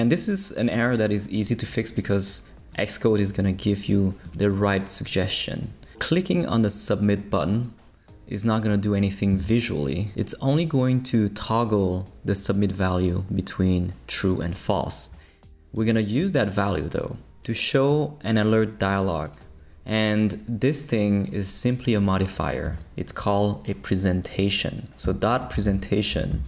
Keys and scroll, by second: 22.6 Return, 25.1-26.4 typing.